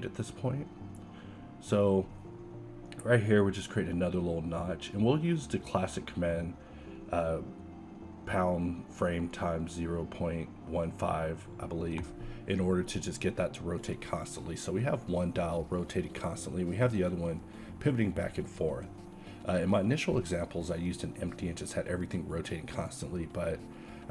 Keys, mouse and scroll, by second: 7.3 alt+a, 10.0 a, 10.4 shift+z, 15.2-15.9 middle drag, 15.9 z, 16.4 z, 16.6 z, 16.9 z, 17.5 Escape, 18.9 h, 20.0 a, 20.6 a, 21.4 a.